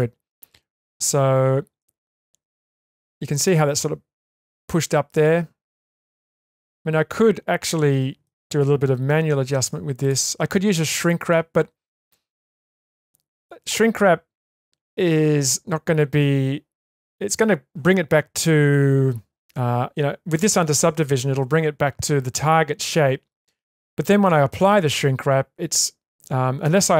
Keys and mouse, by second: 0.0 middle click, 1.8-3.4 middle drag, 4.7-8.2 middle drag, 9.4 1, 10.0 click, 10.7 middle click, 12.1-13.1 ctrl+middle drag, 13.6 shift+middle click.